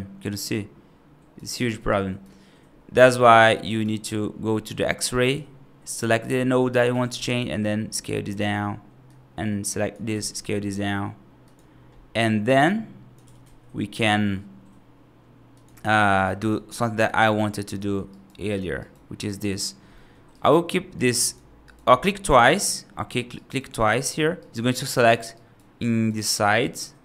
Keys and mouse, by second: 1.5 alt+z, 1.8 right click, 2.8 ctrl+z, 3.2 right click, 5.3-6.3 drag, 6.8 g, 9.1 click, 10.0 g, 12.6 click, 13.1 g, 16.0 F3, 16.4 F2, 16.9 F3, 17.6 alt+z, 18.0 right click, 18.7 right click, 19.1 3, 19.3 click, 19.8 middle click, 20.2 right click, 20.8 click, 21.1 click, 21.5 right click, 22.3 click, 22.4 click, 22.9 middle click, 23.2 right click, 23.8 click, 24.2 right click, 24.8 right click, 25.2 right click, 25.7 right click, 26.1 right click.